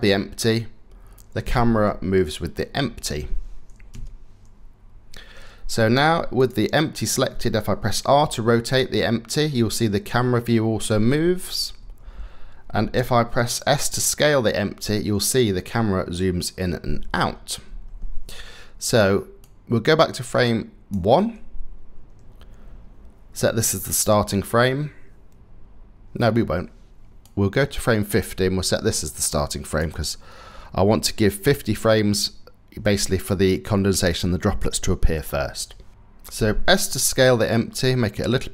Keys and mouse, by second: 3.5 KP_0, 7.9 r, 13.3 s, 19.3-20.5 drag, 27.1-29.6 drag, 36.7 s.